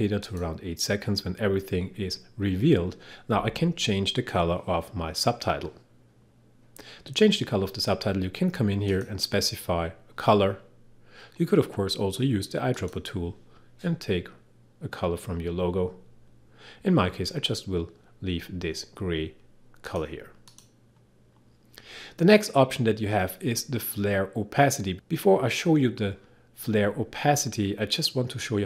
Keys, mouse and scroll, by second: 0.3 click, 8.9 click, 12.8 click, 19.9 click.